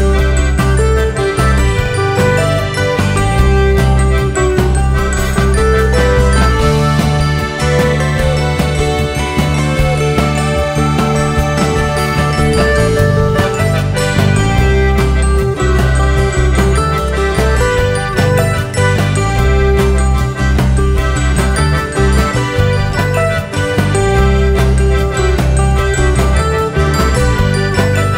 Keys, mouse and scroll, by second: 2.5 click, 3.0 scroll down 2, 3.3 `, 5.0 click, 5.6 `, 6.0 alt+a, 6.5 `, 8.8 click, 9.8 scroll down 1, 10.0 `, 11.2 click, 12.9-15.1 drag, 12.9 `, 13.4-13.8 scroll up 1, 13.8 `, 20.0 click, 20.4 Tab, 21.2 `, 23.4 click, 24.5 ctrl+KP_Add, 25.3 `, 26.2 alt+shift+click, 26.5 `.